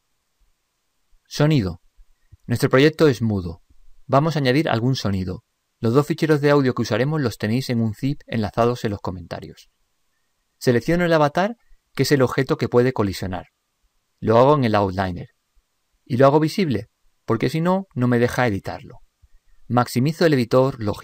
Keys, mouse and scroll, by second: 11.9-13.6 drag, 17.0-18.8 drag.